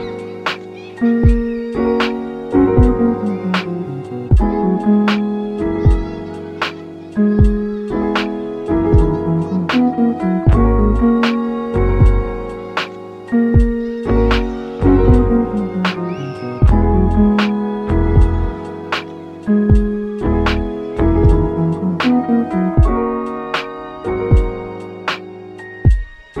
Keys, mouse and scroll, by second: 0.4 click, 1.1 click, 1.7 shift+a, 8.4-14.1 drag, 14.1 KP_0, 17.1-19.6 middle drag, 19.6 s, 21.1-21.6 middle drag, 21.5 g, 22.9-23.3 scroll up 5, 23.3-23.9 middle drag, 23.9-24.2 scroll up 2, 24.2-24.6 shift+middle drag, 24.6 click, 25.7-26.4 scroll down 5.